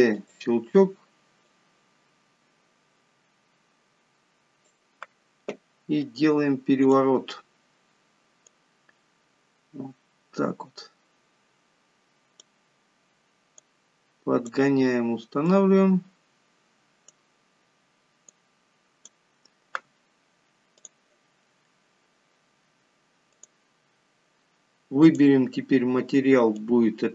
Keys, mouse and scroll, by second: 0.0 shift+d, 1.7 click, 7.0 click, 8.7 click, 13.8 click, 15.7 click, 18.5 click, 21.0 click, 23.6 click, 25.3 click.